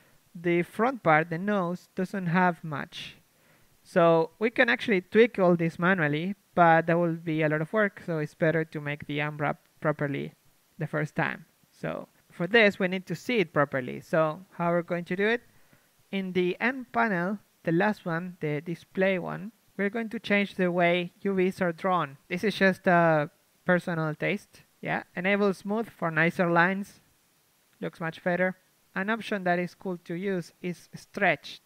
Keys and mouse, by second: 1.8 KP_1, 2.9 a, 3.1 a, 3.3 a, 5.0 c, 6.4 g, 7.0 s, 10.7 c, 12.2 s.